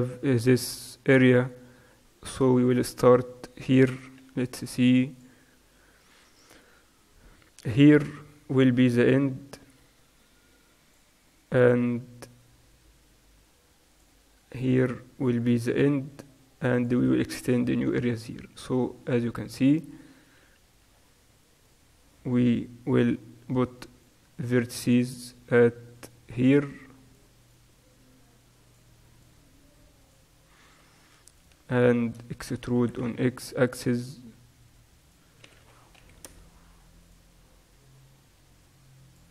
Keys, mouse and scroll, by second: 1.0-4.2 middle drag, 4.2 t, 7.6-16.6 drag, 20.5 t, 21.5-24.0 right drag, 22.5 g, 24.4-26.6 right drag, 24.7 g, 26.6-29.4 drag, 29.4 right click, 29.4 g, 29.9 click, 30.1-31.3 right drag, 31.4-34.0 drag, 32.8 e, 35.5 s, 37.2 click, 37.8 right click, 37.9-39.3 middle drag.